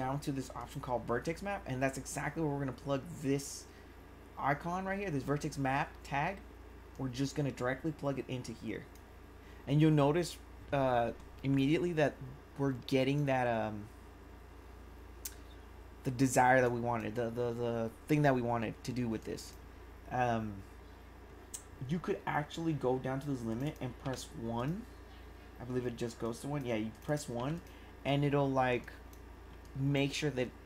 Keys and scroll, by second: 19.2 1.